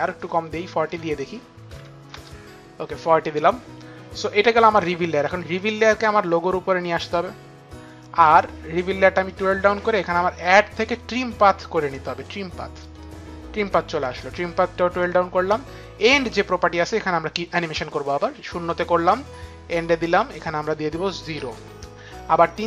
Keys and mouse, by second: 0.5 click, 1.2 KP_4, 1.4 KP_0, 1.8 Return, 5.4 Return, 5.4 click, 5.4 KP_0, 9.0 click, 10.5 click.